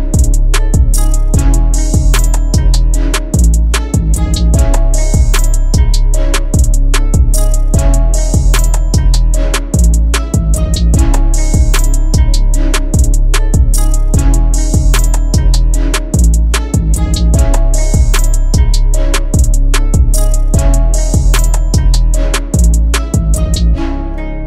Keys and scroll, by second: 4.6 F2, 15.6 space, 22.3 Delete, 23.6 Delete.